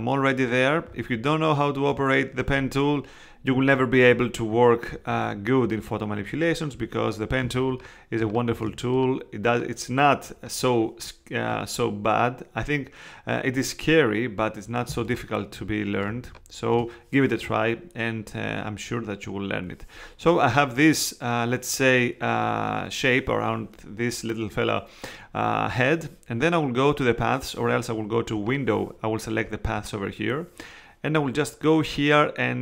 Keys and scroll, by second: 7.4 space, 14.9 space.